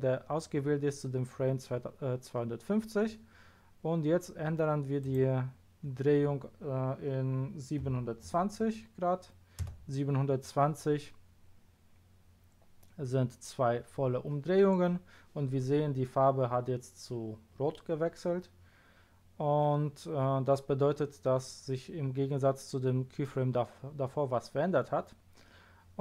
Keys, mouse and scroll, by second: 5.0 click, 7.8 KP_7, 8.2 KP_2, 8.6 KP_0.